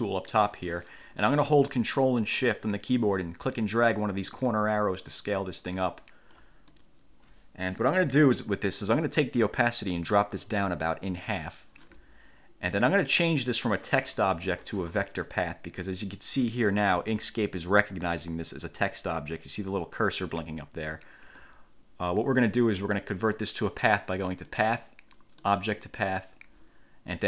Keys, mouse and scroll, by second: 0.5 click, 4.5-6.7 ctrl+shift+drag, 6.9-8.1 ctrl+shift+drag, 9.8-11.7 drag, 18.1 F8, 21.4 F1, 24.7 click, 25.5 click.